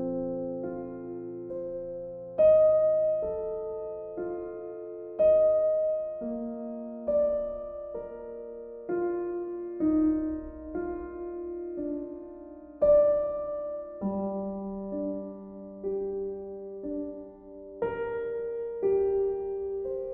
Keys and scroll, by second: 5.8 b.